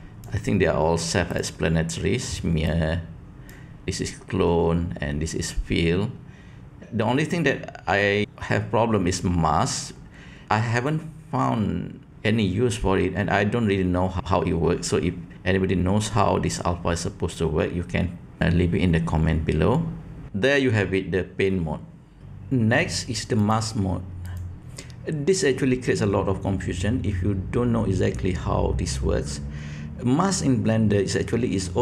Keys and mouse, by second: 2.7 click, 23.5-24.4 drag.